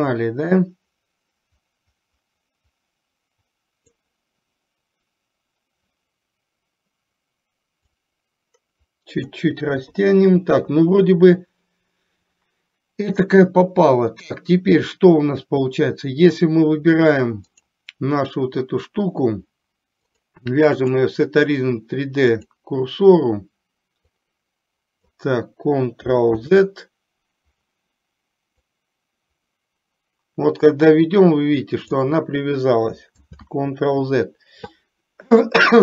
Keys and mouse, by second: 0.2-4.1 drag, 8.1-9.5 drag, 9.8 KP_3, 17.6 click, 20.3-22.7 drag, 24.2-25.2 drag, 26.5 ctrl+z, 28.6-32.2 drag, 33.3 ctrl+z.